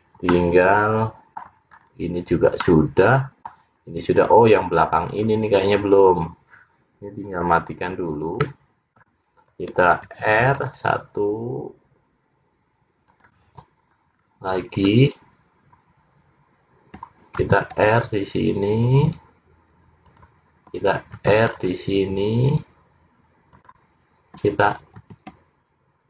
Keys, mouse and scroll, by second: 0.4 middle click, 1.9-2.8 scroll up 1, 2.8 middle click, 2.8 scroll up 3, 3.9-4.3 scroll down 2, 5.2 click, 7.5 click, 8.5 middle click, 10.1 ctrl+r, 14.2-14.8 scroll up 3, 14.8-15.4 scroll down 1, 17.5 ctrl+r, 21.5 ctrl+r, 25.1 ctrl+r.